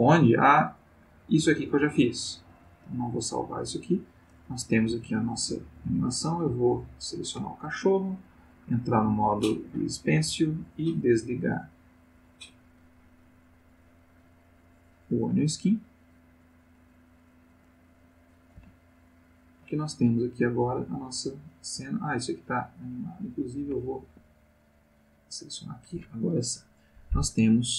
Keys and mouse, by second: 0.9 click, 2.8 click, 6.3 click, 8.5 click, 9.8 click, 11.1 click, 11.7 click, 15.0-16.9 drag, 18.6 space, 20.6 click, 22.6 click, 24.0 Escape, 25.0 click.